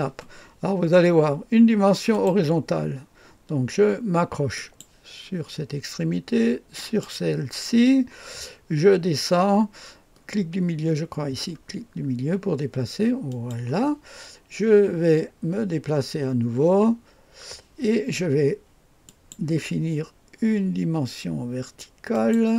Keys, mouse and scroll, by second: 2.1 click, 4.5 click, 6.8 click, 13.3 click, 17.1 scroll down 1, 19.1 click, 22.1 click.